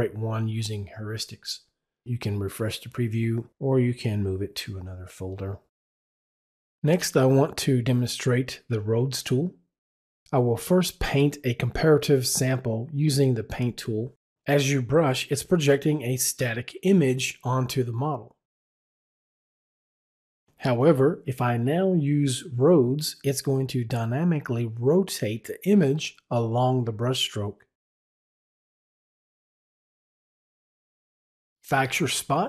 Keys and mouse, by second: 5.9 right click, 6.1 click, 7.6 click, 14.8 click, 18.5 click, 21.0 click, 22.6 click, 24.2 right click, 26.4 click.